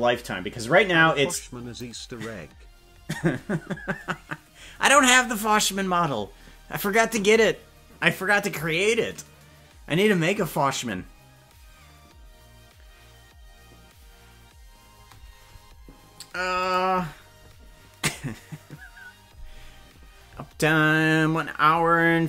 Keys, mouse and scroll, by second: 16.6 click.